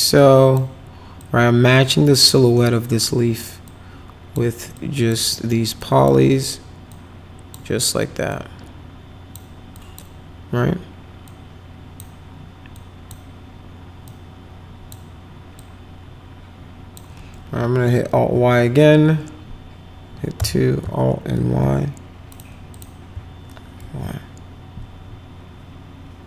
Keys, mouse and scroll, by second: 0.1 click, 1.2-2.2 drag, 2.8 click, 3.6 click, 4.7 click, 5.3 middle click, 5.8 click, 6.9 click, 8.3-9.3 drag, 9.7 click, 11.2 click, 12.7 click, 14.1 click, 15.5-16.9 drag, 18.1 alt+y, 20.3 2, 21.4 alt+y, 22.3 click, 22.7 click, 23.8 alt+y.